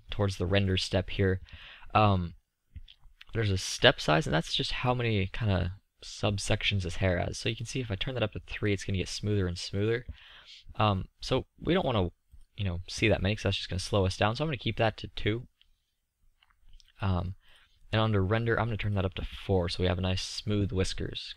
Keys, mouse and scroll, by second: 0.2-0.5 middle drag, 1.9-4.1 middle drag, 5.4-6.2 middle drag, 6.4-8.7 middle drag, 8.7 click, 10.7 drag, 10.7-15.0 middle drag, 20.7-21.3 middle drag.